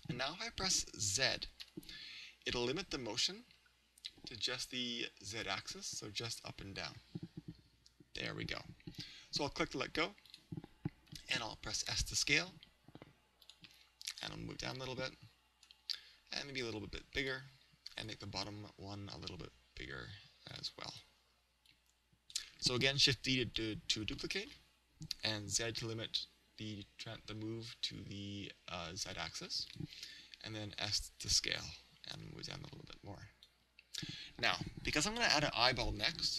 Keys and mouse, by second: 10.4 click, 11.9 s, 13.6-16.4 drag, 16.6 s, 17.3-18.5 drag, 18.0 right click, 19.3 right click, 19.3 s, 19.9 right click, 20.6 click, 20.9 right click, 22.6 click, 22.6 right click, 24.5 shift+d, 29.8-33.8 drag, 30.4 s.